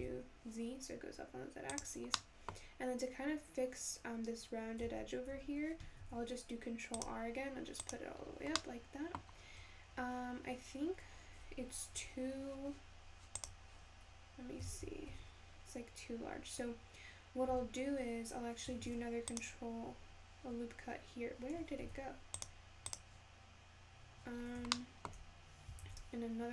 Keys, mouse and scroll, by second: 2.1 scroll down 1, 2.2 middle click, 2.8-3.2 scroll up 1, 3.2-4.3 scroll down 3, 4.9 Tab, 5.3 Tab, 6.0 ctrl+r, 8.2-8.6 scroll down 2, 8.6 middle click, 9.3 scroll up 2, 11.1-12.0 scroll down 1, 12.0 `, 14.7 alt+z, 15.1 Tab, 17.5 Tab, 18.9 ctrl+r, 21.8 ctrl+r, 24.4 scroll up 3, 24.8 shift+middle click, 25.2 scroll up 1, 25.8 ctrl+r.